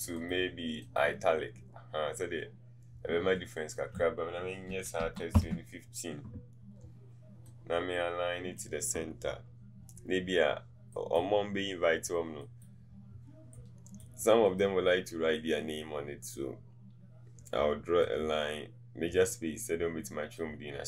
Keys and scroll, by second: 4.8 KP_1, 5.1 KP_5.